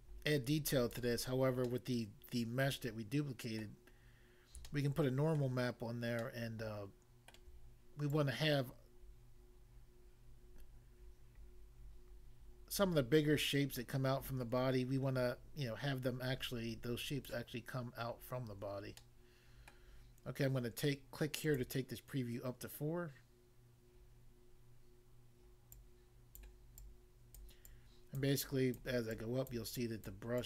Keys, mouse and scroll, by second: 1.2 scroll down 1, 1.7 middle click, 3.6 middle click, 4.1-4.6 scroll up 1, 4.6 shift+middle click, 6.3 shift+middle click, 8.2 click, 17.3 click, 18.2 scroll down 1, 19.0 middle click, 19.7 middle click, 21.4 click, 21.6 click, 25.8 click, 26.3 click, 26.8 click, 27.5 click, 28.2 click, 28.8 click, 29.5 click, 30.0 click.